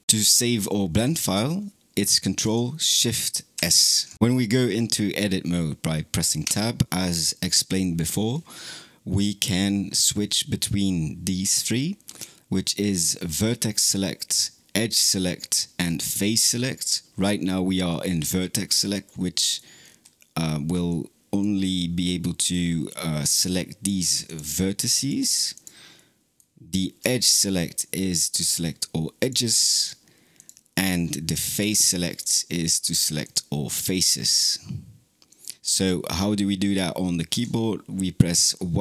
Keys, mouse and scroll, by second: 3.4 ctrl+shift+s, 6.3 Tab, 18.9 middle click, 19.6-20.7 scroll up 5, 20.7 click, 21.9-24.1 middle drag, 24.1 click, 24.8 click, 25.4 click, 25.8-26.9 middle drag, 26.9 2, 28.3 click, 29.0 click, 29.6 click, 30.2 click, 31.4 3, 32.0 click, 32.6 click, 33.1 click, 33.8 click, 35.1 click, 37.2 Tab.